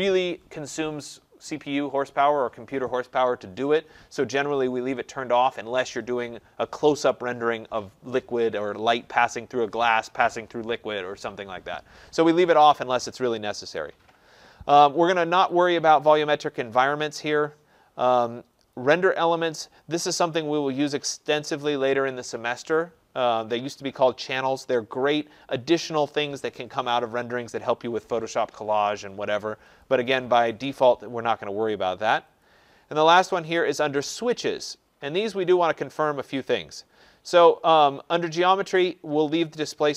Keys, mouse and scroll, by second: 13.8 click, 15.6 click, 17.0 click, 18.7 click, 29.8 click, 32.4 click, 36.2 click.